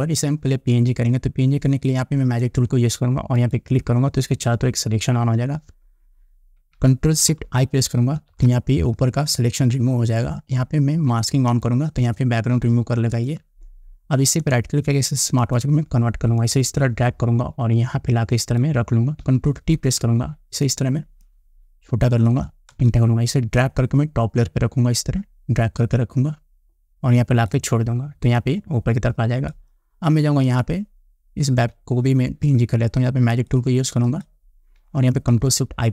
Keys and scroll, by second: 8.8 ctrl+shift+i, 20.3 ctrl+t, 23.3 Return.